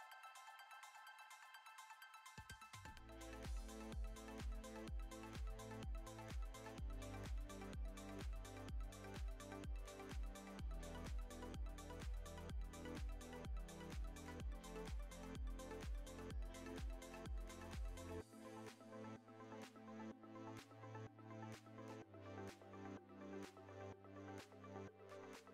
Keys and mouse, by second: 1.4 shift+middle drag, 1.7 middle drag, 3.0 e, 5.4 click, 5.8 alt+shift+click, 6.2 alt+shift+click, 7.0 middle click, 8.0 alt+e, 11.2 shift+middle click, 12.8-13.1 middle drag, 13.7 click, 14.0 middle click, 14.4 g, 16.8 shift+middle drag, 17.8 ctrl+Tab, 18.5 middle drag, 19.0 Tab, 19.4 shift+middle drag, 20.0 click, 20.3 middle click, 21.2 i, 22.6 middle click, 23.0 e, 24.9 ctrl+z, 25.3 ctrl+z.